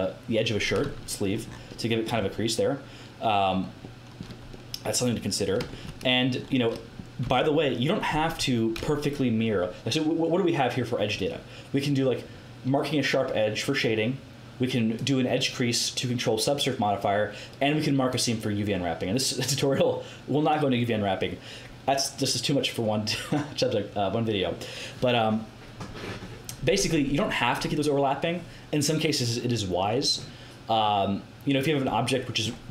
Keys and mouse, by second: 1.6-4.1 middle drag, 7.2 Tab, 26.9 Tab.